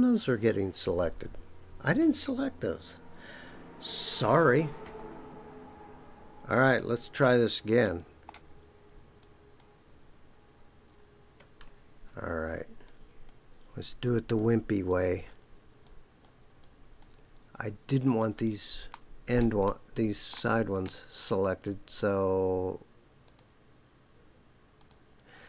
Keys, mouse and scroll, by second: 4.8 ctrl+z, 6.5 ctrl+z, 7.8 middle click, 9.2 click, 12.8 shift+click, 14.0 shift+click, 14.8 shift+click, 15.8 shift+click, 16.6 shift+click, 18.9 shift+middle click, 19.6 middle click, 20.7 scroll up 2, 23.2 shift+click, 24.8 shift+click.